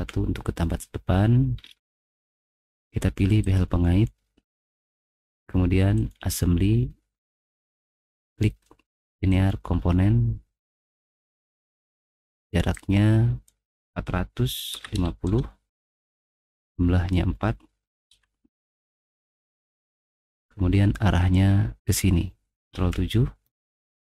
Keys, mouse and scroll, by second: 1.5 middle click, 1.5-2.0 scroll up 2, 1.9 middle click, 2.1 middle click, 3.4 click, 5.9 click, 9.5 click, 12.7 click, 14.5-15.8 typing, 16.5 click, 16.8-17.5 typing, 17.0 click, 18.8 Return, 19.9-20.5 scroll up 2, 21.8 click, 22.7 ctrl+7, 23.7 middle click, 23.9 middle click.